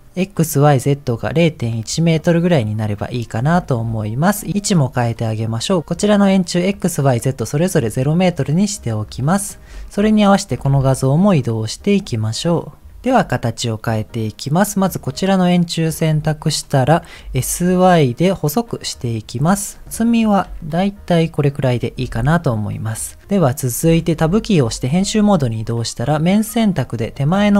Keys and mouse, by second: 3.8 g, 5.0 click, 7.3-9.1 drag, 9.5 click, 10.5 g, 15.2-16.2 middle drag, 17.2 s, 20.4 s, 23.2 middle click, 24.3 Tab, 26.3 click, 26.8 click.